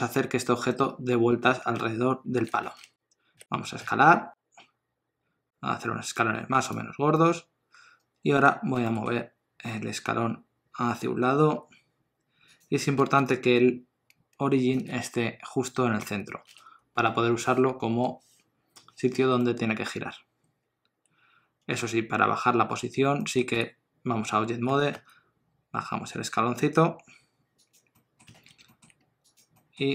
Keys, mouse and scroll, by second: 3.4 s, 7.2 middle click, 8.8 g, 19.4 middle click, 23.2 middle click, 23.5 Tab, 24.7 g, 27.9 middle click, 28.3 alt+a, 28.7 shift+middle click, 29.3 click, 29.6 middle click.